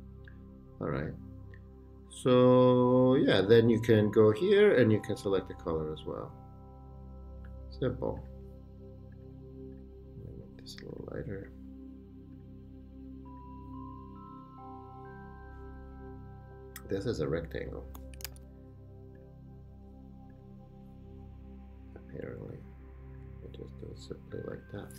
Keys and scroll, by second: 18.0-18.8 typing.